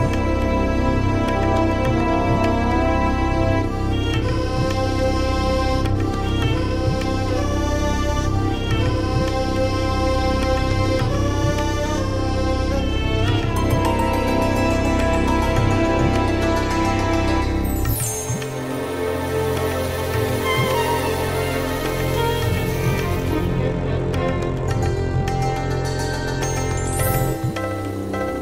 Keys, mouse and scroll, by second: 2.2 click, 3.3-3.6 scroll down 2, 4.0 scroll up 2, 5.2-5.7 scroll down 4, 6.8 scroll down 2, 8.0 click, 12.4 click, 14.9 click, 16.2 middle click, 17.5 KP_5, 18.9-19.3 ctrl+scroll down 2, 19.6-20.8 ctrl+drag, 22.2 click, 23.5-24.6 drag, 24.6 click, 25.7 click, 27.4 ctrl+c.